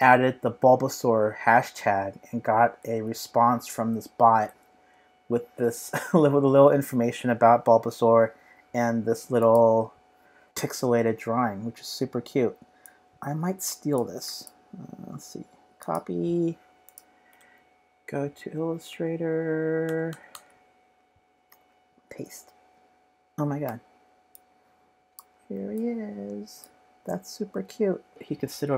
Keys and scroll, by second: 2.8 super+Tab, 17.4 super+Tab, 18.9 super+Tab, 19.8 super+Tab, 20.1 super+Tab, 21.1 super+space, 21.5 super+v, 23.6 v.